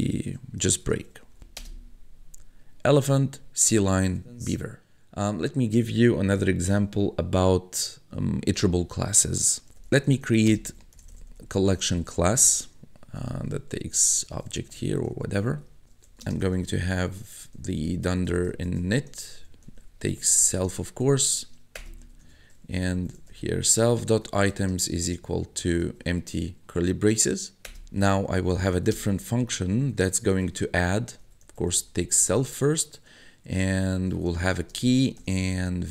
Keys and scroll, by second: 0.4-1.9 typing, 9.4-16.7 typing, 18.0-25.8 typing, 21.8 Return, 22.0 Tab, 27.7 Return, 28.0 Tab, 28.3-32.6 typing, 33.8-35.9 typing.